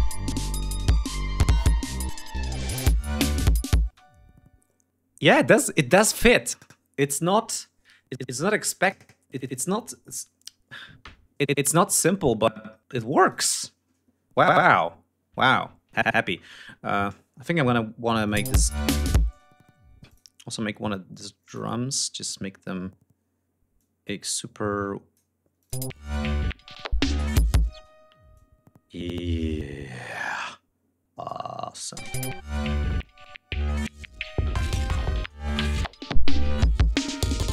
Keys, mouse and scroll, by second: 3.4 space, 3.7-4.1 scroll up 2, 13.0 click, 13.3-13.9 scroll down 4, 14.3-14.7 ctrl+scroll up 3, 15.1 ctrl+scroll down 2, 15.4-16.6 ctrl+scroll up 3, 17.0 ctrl+scroll up 1, 17.9 ctrl+click, 18.0 space, 18.1 ctrl+scroll up 1, 18.9 space, 19.1 d, 19.6 click, 21.0 click, 23.5-25.0 drag, 25.3 click, 25.4 space, 27.4 space, 28.0-31.2 drag, 31.6 click, 31.8 space, 32.2 ctrl+scroll down 2.